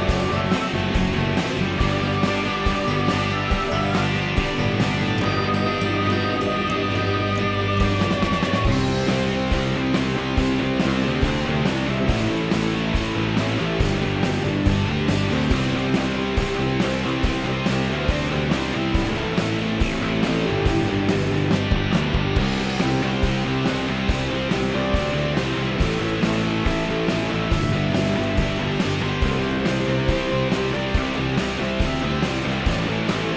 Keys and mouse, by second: 0.4 shift+d, 11.0 shift+d, 17.7 r, 24.1 middle click, 24.7-25.1 middle drag, 25.3-25.6 shift+middle drag, 25.9-26.3 middle drag, 26.4-26.8 shift+middle drag, 26.9 middle click, 27.3-28.0 ctrl+middle drag, 29.0 shift+d, 32.3 x.